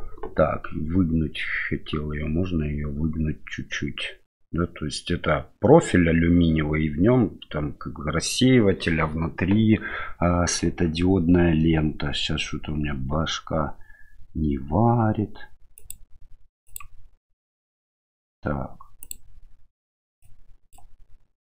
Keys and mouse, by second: 15.8-16.8 drag, 19.0 click, 20.2 click.